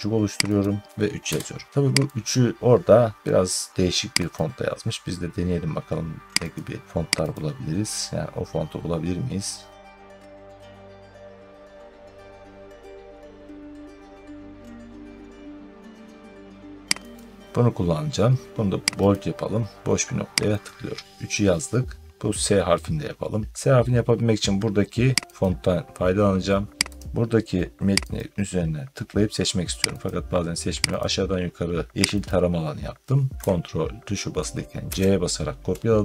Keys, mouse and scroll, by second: 0.4 click, 1.1 3, 2.6 click, 4.2 click, 6.4 click, 7.2 click, 7.9 scroll down 4, 8.1 scroll, 8.8 scroll, 9.8-10.8 scroll down 9, 13.8 scroll down 10, 17.0 click, 18.9 click, 20.5 click, 25.2 click, 26.8 click, 28.0 click, 28.9 scroll, 29.9 click, 30.8 click, 32.1 click, 34.7 ctrl+c.